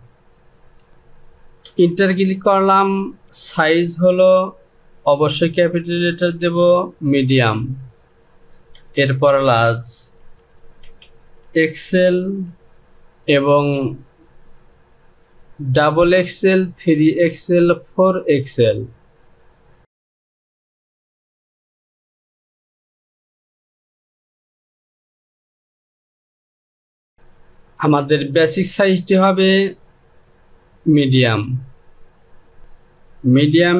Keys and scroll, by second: 1.3 Return, 4.8 Caps_Lock, 6.8 m, 8.3 Return, 9.8 l, 10.4 Return, 11.0 x, 11.9 l, 12.5 Return, 21.1 x, 22.2 l, 22.8 Return, 23.5-24.8 typing, 24.3 Return, 26.0 Delete, 26.2 KP_2.